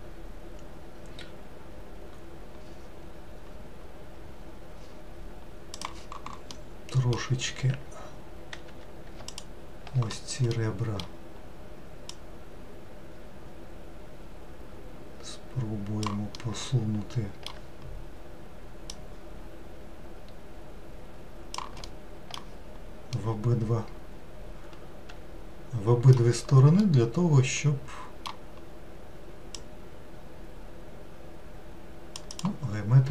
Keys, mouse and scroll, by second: 6.6-8.7 middle drag, 8.7 2, 9.3 alt+click, 10.6-12.1 middle drag, 12.1 click, 16.4-19.0 middle drag, 19.0 click, 21.9 alt+middle click, 23.2-26.2 middle drag, 26.9-29.6 middle drag, 29.6 click, 32.4 click.